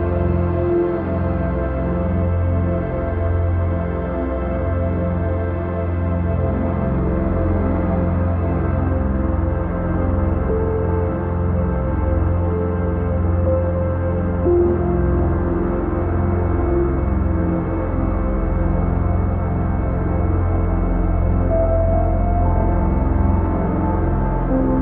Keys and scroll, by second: 20.4 ctrl+i, 24.4 ctrl+z.